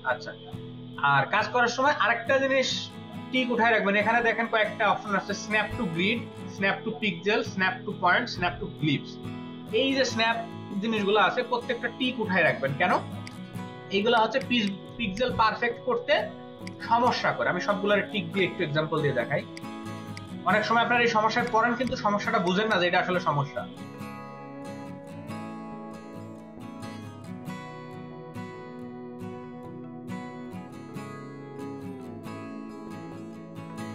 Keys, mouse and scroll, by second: 14.0 ctrl+space, 14.2 ctrl+double click, 14.8-15.2 space, 17.0 alt+shift+click, 18.6 v, 21.8 click, 24.9 double click, 25.4 alt+click, 29.0 double click, 29.2 ctrl+space, 29.4 ctrl+click, 29.9 ctrl+space, 31.4 space, 31.6 click, 32.0 space, 33.2 ctrl+alt+double click, 33.4 space.